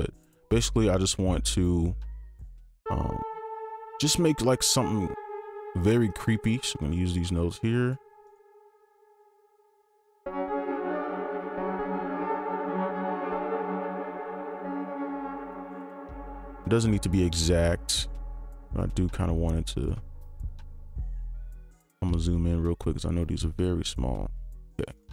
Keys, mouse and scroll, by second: 6.1 ctrl+click, 8.8 right click, 9.3 alt+click, 10.2 space, 11.3 space, 14.6 alt+click, 15.6 alt+2, 15.7 alt+click, 17.1 alt+2, 17.5 alt+click, 19.3 alt+2, 19.7 alt+click, 24.6-24.9 scroll up 1.